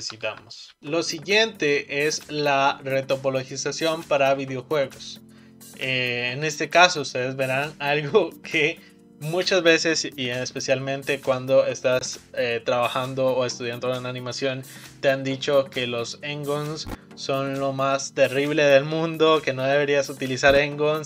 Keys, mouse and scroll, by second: 0.1 ctrl+z, 0.3 ctrl+z, 0.8 click, 1.0-2.1 shift+middle drag, 2.1-2.6 scroll up 3.